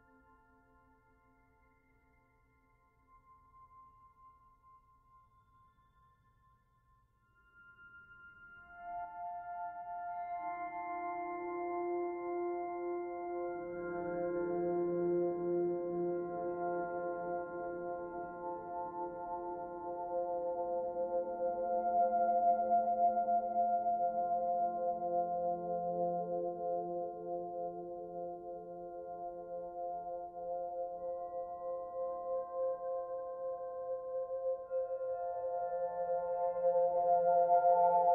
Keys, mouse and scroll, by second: 0.1 middle click, 1.6 click, 2.3 click, 4.2 middle click, 6.2 click, 6.7 click, 9.1 shift+middle click, 9.7 middle click, 11.3 click, 12.0 click, 12.3 middle click, 13.7 e, 17.5 click, 18.3 click, 18.6 middle click, 19.7 click, 21.0 middle click, 21.9 middle click, 23.0-23.4 scroll up 1, 23.4 middle click, 25.8 click, 26.8 click, 28.7 middle click, 33.0 middle click, 34.0 click, 34.8 click, 37.7 shift+middle click.